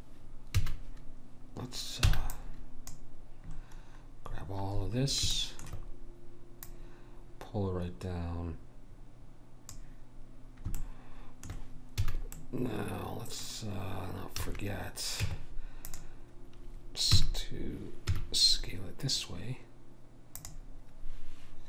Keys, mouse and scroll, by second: 0.6 a, 2.1 b, 6.7 click, 12.0 a, 15.2 Tab, 15.2 a, 17.1 s.